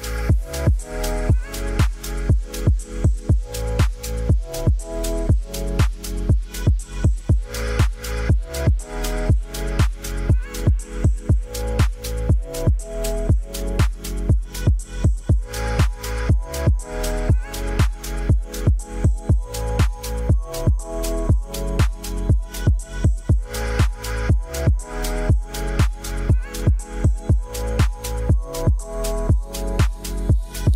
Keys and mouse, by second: 0.4 middle click, 0.7 ctrl+s, 0.9 middle drag, 1.6 middle drag, 1.8-2.1 drag, 2.1-2.5 middle drag, 2.5 drag, 2.6 middle click, 5.2-6.4 drag, 9.0-9.4 middle drag, 10.2 click, 10.7 ctrl+s, 11.2 drag, 12.3-12.7 drag, 12.3 middle click, 13.1 shift+drag, 13.3 middle drag, 13.6 middle drag, 14.0 shift+middle click, 14.1 middle click, 14.7 middle drag, 15.3 KP_5, 15.8 middle drag, 16.6 drag, 17.4 drag, 18.5 click, 19.1 middle click, 19.4 middle drag, 20.0 s, 20.6 middle drag, 21.1-21.4 middle drag, 21.8 middle click, 22.6 s, 23.3 middle click, 24.6 shift+middle click, 24.7 middle drag, 25.0 middle drag, 25.3 shift+middle click, 25.5-26.3 middle drag, 27.1 middle click, 27.8-28.7 middle drag, 29.4 middle click, 30.4 shift+a.